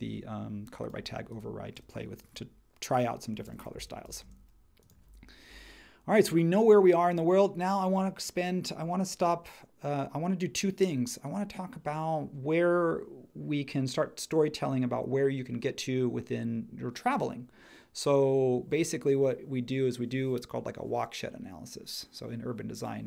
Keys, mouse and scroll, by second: 3.7-4.2 typing.